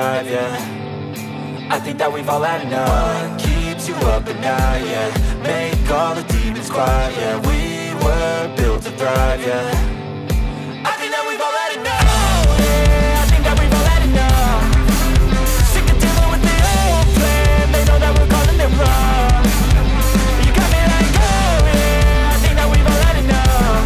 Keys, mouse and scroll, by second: 7.7 right click, 10.9 right click, 14.8 ctrl+z, 17.5 space, 21.5 ctrl+z.